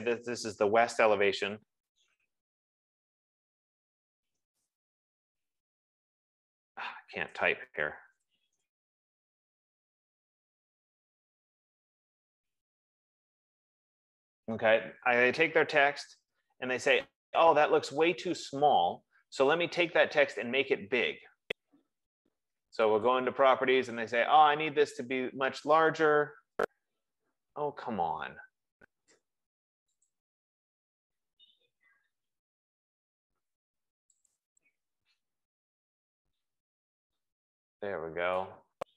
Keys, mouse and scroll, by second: 1.8 e, 2.3 e, 2.4 BackSpace, 2.7 ctrl+a, 3.6-6.9 typing, 7.8 ctrl+a, 8.5 Caps_Lock, 12.9-13.9 typing, 22.2 ctrl+a, 23.6 click, 27.1 click, 30.5 click, 34.9 click.